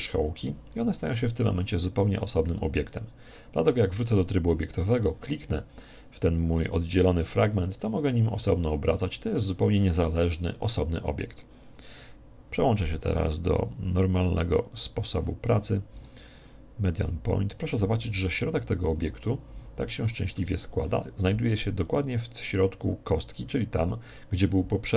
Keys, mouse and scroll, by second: 2.4 Tab, 4.8 right click, 12.6 click, 15.9 right click.